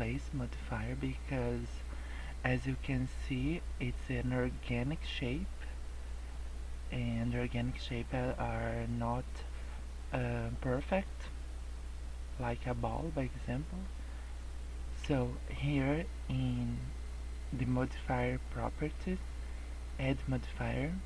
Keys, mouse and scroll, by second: 0.8 scroll down 3, 1.1 middle click, 1.4 scroll up 2, 19.8 click.